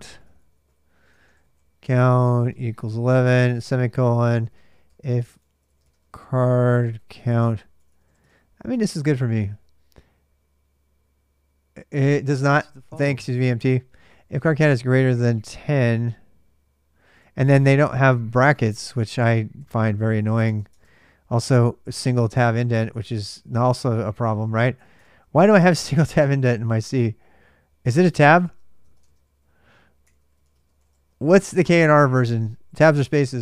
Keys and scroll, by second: 2.0-8.7 typing, 3.8 Return, 14.8-15.9 typing, 16.9 alt+Tab, 18.4 alt+Tab, 19.0 Return, 19.3 Tab, 20.4 Tab, 21.7 Tab, 24.7 BackSpace, 25.5 Return, 25.7 Tab, 28.2 Tab, 28.6-32.6 typing.